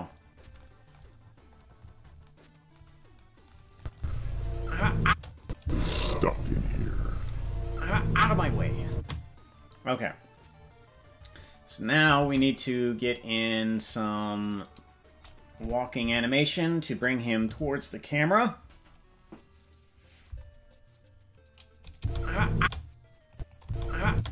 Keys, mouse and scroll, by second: 1.2-2.2 scroll down 12, 3.8 click, 3.9 space, 5.0 space, 5.4 click, 5.6 space, 8.9 space, 12.2 ctrl+Tab, 15.5 click, 15.9 KP_0, 21.9 space, 22.6 space, 23.3 click, 23.6 space, 24.1 space.